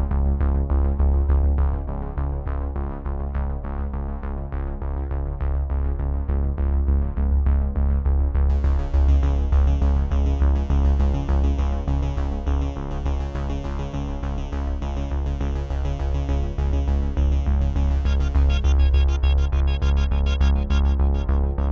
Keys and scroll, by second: 2.8 0.